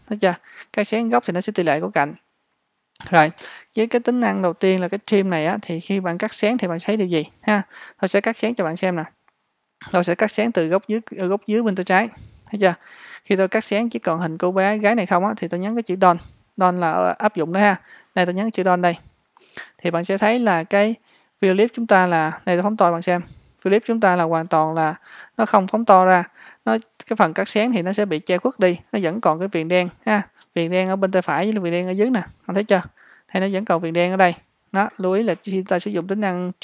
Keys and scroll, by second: 24.5 space, 35.1 Escape.